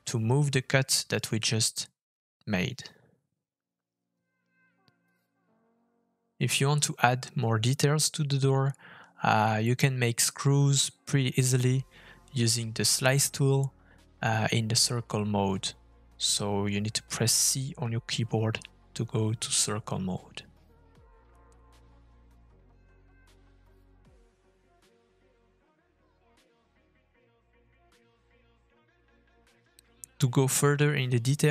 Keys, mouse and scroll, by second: 1.6 middle click, 2.6-3.1 shift+scroll down 1, 3.2-3.5 scroll down 2, 3.5 shift+middle click, 4.1 middle click, 5.9 scroll down 3, 6.2 middle click, 7.9 shift+middle click, 8.4 middle click, 8.8 click, 9.4 f, 11.7 middle click, 12.0 scroll up 2, 12.4 shift+middle click, 12.9 middle click, 19.2 middle click, 21.4 middle click, 31.0 middle click.